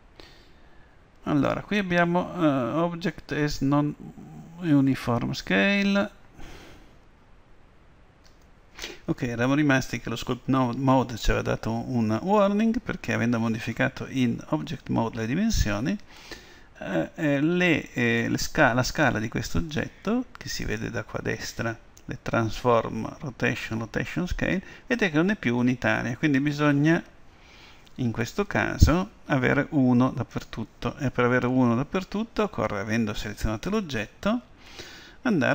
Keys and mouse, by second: 18.2-20.1 drag, 20.7-32.2 drag.